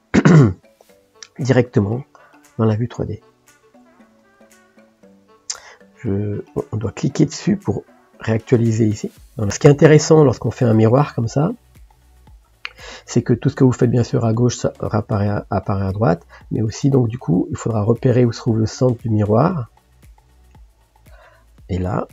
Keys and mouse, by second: 0.3 middle click, 1.3-2.7 drag, 2.7-7.6 middle drag, 7.6-9.5 drag, 13.3-15.5 middle drag, 15.5 click, 16.4 middle click, 17.4 click, 18.1-19.8 drag, 20.3 click.